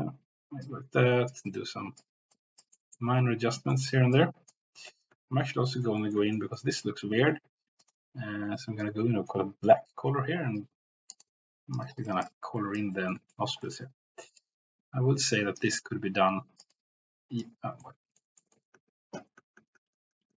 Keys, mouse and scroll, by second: 0.7 click, 1.5 click, 2.6 click, 3.7 middle click, 4.2 click, 5.2 ctrl+z, 5.9 middle click, 6.3 shift+middle click, 10.5-11.8 drag, 12.6 click, 12.9 middle click, 13.3 shift+middle click, 13.7 middle click, 14.4-15.6 drag, 16.7 click, 17.8 middle click, 18.4 ctrl+middle click, 18.9 ctrl+z, 19.2 ctrl+z, 19.4 ctrl+z, 19.7 ctrl+z, 19.8 ctrl+z, 20.2 ctrl+z.